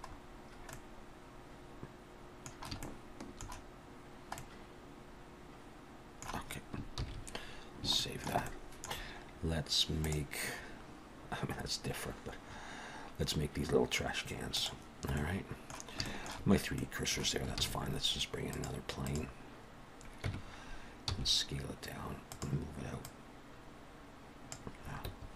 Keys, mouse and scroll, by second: 0.1-1.0 scroll up 4, 0.7 middle click, 2.8 shift+middle click, 4.1-4.4 scroll down 1, 4.4 middle click, 7.0 ctrl+s, 7.5-7.8 scroll down 1, 8.0 shift+middle click, 8.4 middle click, 15.1 middle click, 16.0 shift+middle click, 16.8 middle click, 17.6 shift+a, 20.2 Tab, 21.1 s, 23.0 click, 25.1 Escape.